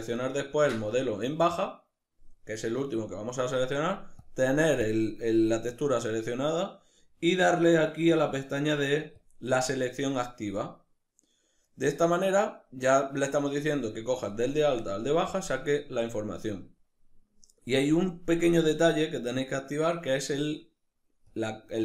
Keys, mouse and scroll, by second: 3.9-6.9 drag, 6.9 middle click, 7.8 click, 8.8 click, 9.3-20.9 middle drag, 20.9 click.